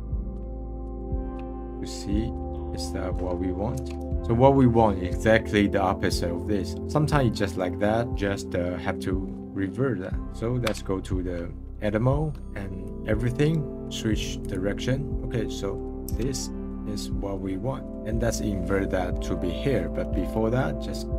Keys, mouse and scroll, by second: 0.4-1.3 middle drag, 1.3-1.9 scroll up 5, 1.9 middle click, 4.1 middle click, 5.8-6.8 scroll down 4, 6.8 middle click, 6.9 scroll up 3, 7.3-7.7 middle drag, 7.7 scroll up 1, 8.1-10.6 drag, 10.6 Tab, 11.3 scroll down 1, 12.8 click, 13.4 right click, 15.1 middle click, 16.1 Tab, 16.5 middle click, 16.9-17.7 scroll up 4, 17.7 middle drag.